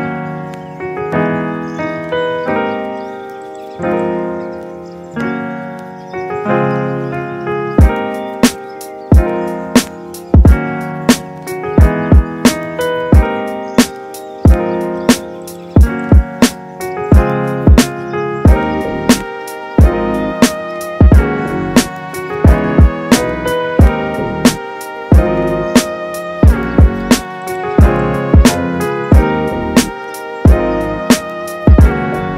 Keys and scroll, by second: 16.1 space, 24.8 m, 25.6 space.